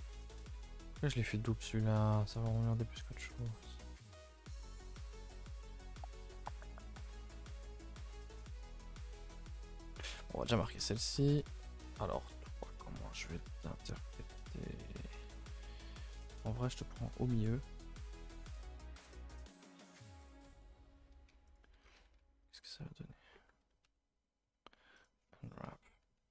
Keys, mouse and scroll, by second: 0.6-1.0 scroll up 2, 1.0 middle click, 1.9 alt+shift+click, 2.1-3.4 middle drag, 3.4 shift+click, 3.7 shift+click, 4.4 alt+shift+click, 5.1 shift+click, 5.3 shift+click, 5.5 middle click, 6.4 alt+shift+click, 6.6 middle click, 6.8-7.1 scroll up 4, 7.1 shift+middle click, 7.9 shift+click, 8.4 shift+click, 8.8-9.6 scroll down 1, 9.6 shift+click, 10.5 right click, 10.7 scroll down 1, 10.9 shift+middle click, 11.2 scroll up 1, 11.4 shift+middle click, 12.2-12.5 scroll up 1, 12.5 middle click, 13.3 alt+shift+click, 13.5-15.5 middle drag, 15.5 a, 15.7 a, 16.3 alt+shift+click, 17.1 alt+shift+click, 17.6 middle click, 18.4 shift+click, 19.0 shift+click, 20.3 shift+click, 21.6 right click, 21.8 scroll down 5, 22.0 a, 22.1 a, 22.4 scroll down 1, 22.6 a, 25.0 u, 25.9 a, 26.1 a.